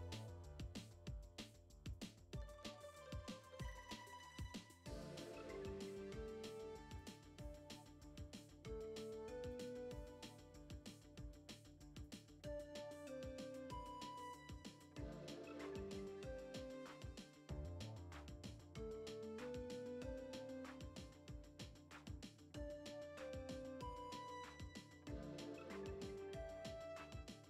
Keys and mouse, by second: 1.1 n, 1.5 F6, 1.5 middle click, 2.1 a, 2.5 KP_7, 3.2 u, 4.6 a, 4.9 s, 5.8 r, 6.8 s, 7.5 g, 9.3 F6, 9.3 n, 10.1 click, 13.5 shift+middle click, 14.3-14.9 drag, 15.1-18.8 drag, 19.1 shift+middle click, 20.5 click, 21.5 middle click, 22.1-23.5 drag, 24.7 click, 25.3 Delete, 26.8-27.4 middle drag.